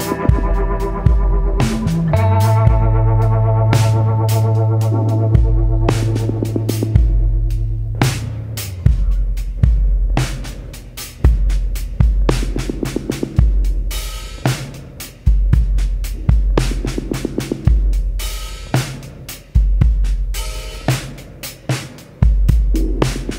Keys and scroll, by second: 1.5 ctrl+z, 1.6 ctrl+z, 2.2 scroll, 3.0 ctrl+z, 3.5 ctrl+z, 7.2 ctrl+z.